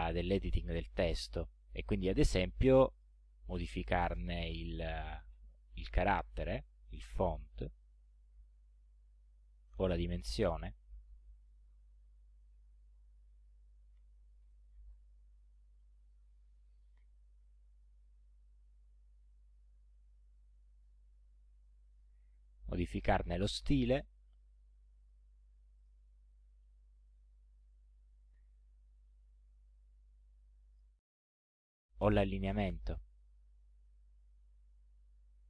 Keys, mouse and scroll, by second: 3.0 click, 4.5-5.3 scroll up 4, 7.8 click, 10.1 click, 11.5 BackSpace, 13.7-14.7 typing, 19.0 ctrl+scroll down 2, 20.3-21.9 drag, 22.2 ctrl+scroll up 2, 23.2 ctrl+click, 25.0 click, 25.8 click, 29.6-30.9 drag, 33.1 click.